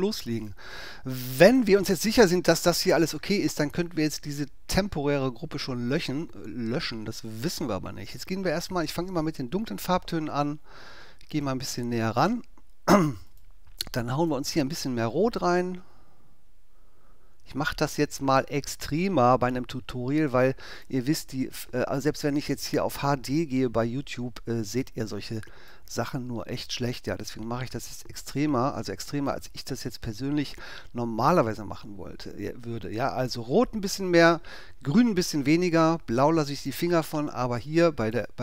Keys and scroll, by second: 11.2 super+space.